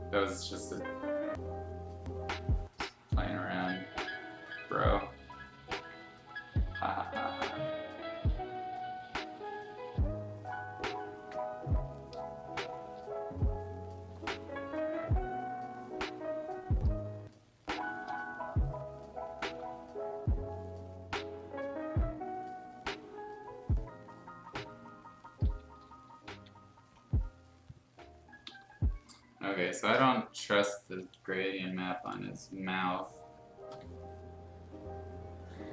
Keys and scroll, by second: 12.1 space, 16.9 space, 28.4 Escape, 33.1 space, 33.9 r.